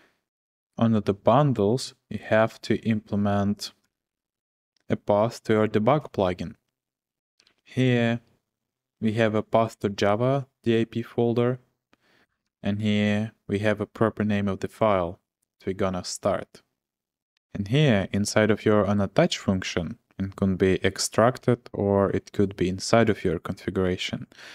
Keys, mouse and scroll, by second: 0.2 o, 3.6-4.8 typing, 7.1-7.9 typing, 12.2 w, 12.5 w, 13.0 w, 24.1-24.5 j.